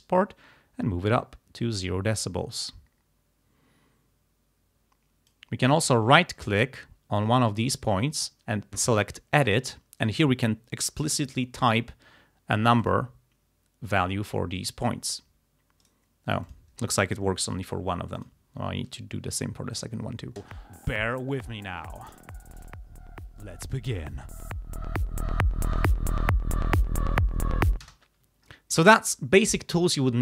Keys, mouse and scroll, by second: 5.9 right click, 7.7 right click, 9.4 click, 11.2 0, 12.9 click, 15.8 right click, 16.5 click, 17.5 0, 18.2 click, 19.8 click, 20.4 space, 27.9 space, 28.6 ctrl+scroll down 2.